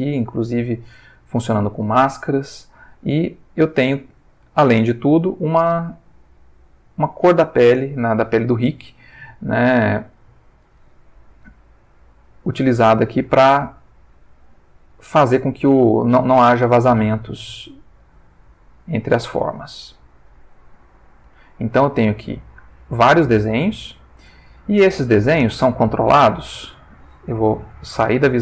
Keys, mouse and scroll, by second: 0.4-5.5 drag, 11.6-21.5 drag, 21.9-25.3 drag, 25.6 Tab, 27.9 /.